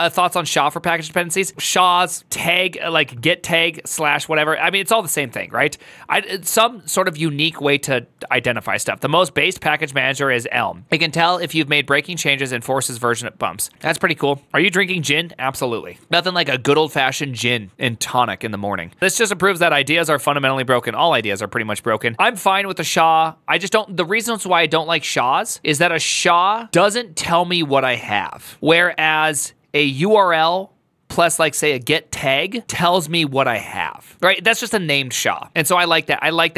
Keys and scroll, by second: 0.9-2.0 typing, 4.4-6.5 typing.